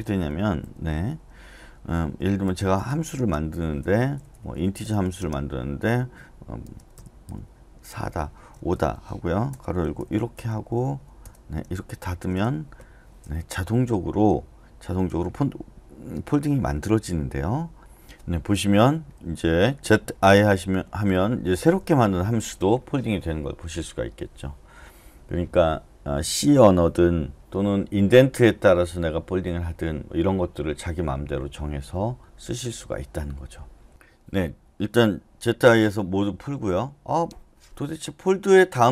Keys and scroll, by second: 0.0-1.1 typing, 2.2-10.5 typing, 9.5 Return, 10.9 Return, 11.2 Return, 12.4 Return, 12.8 Escape, 13.5 k, 19.0-22.4 typing, 35.5-36.4 typing.